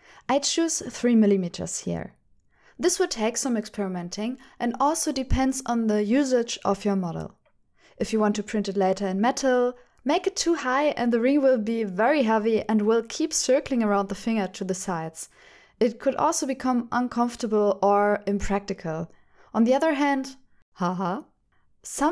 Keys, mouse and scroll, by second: 0.2 z, 3.3 click, 3.6 shift+middle click, 4.6 shift+middle click, 7.9 click, 11.9 click, 14.0 shift+click, 14.5 shift+middle click, 17.0 shift+middle click, 17.2 shift+right click.